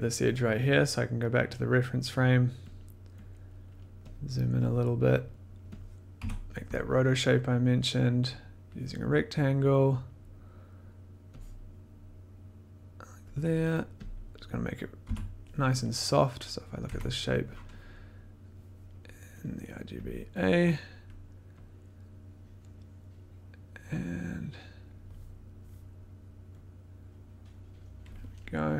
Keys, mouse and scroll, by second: 1.5 click, 2.7 click, 3.3 click, 4.2 click, 4.2 middle click, 4.6 click, 4.7 middle click, 5.3 middle click, 5.7 click, 6.2 scroll, 8.6 click, 9.5 scroll, 13.2 click, 14.1 click, 15.0 b, 16.8 click, 16.9 1, 19.4 click, 20.0 click, 20.4 click, 24.8 click, 27.2 click.